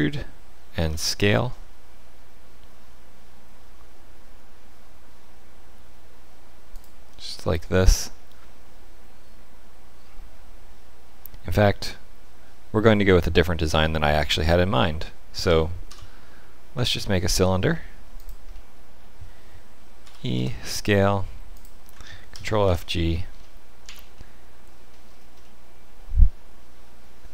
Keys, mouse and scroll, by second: 7.3 middle click, 15.4 e, 18.5 middle click, 20.0 e, 22.3 ctrl+f, 23.0-23.8 scroll down 6, 23.8 Tab, 24.1 middle click, 24.8-25.3 scroll down 4, 25.4 middle click.